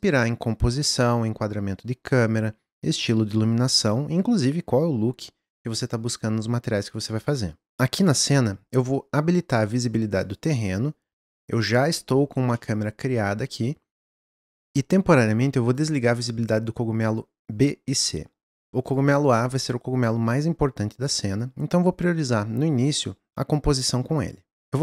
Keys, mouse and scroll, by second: 10.3 click, 11.7 click, 12.2-12.5 scroll down 1, 12.5-14.4 middle drag, 15.8-18.8 drag, 18.8 click.